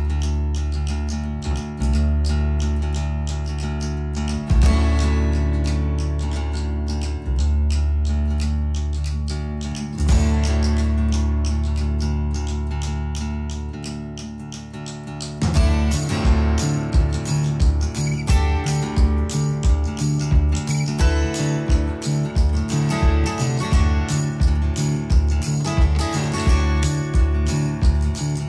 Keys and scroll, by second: 1.4 1, 2.5-3.9 typing, 8.0-9.2 typing, 13.0 space, 14.4 @, 16.9-20.0 typing, 20.5 Escape.